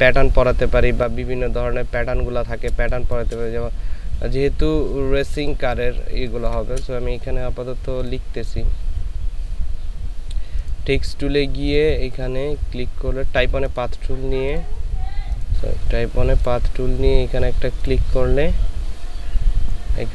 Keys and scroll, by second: 3.0 space, 6.1 ctrl+space.